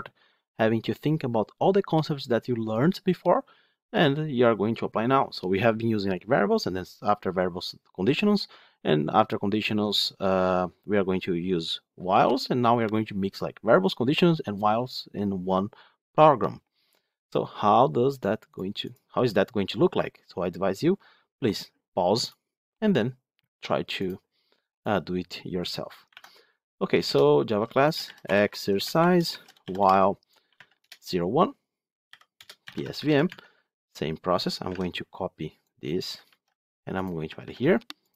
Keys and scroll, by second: 26.0 alt+Insert, 33.2 Tab, 37.3 Tab.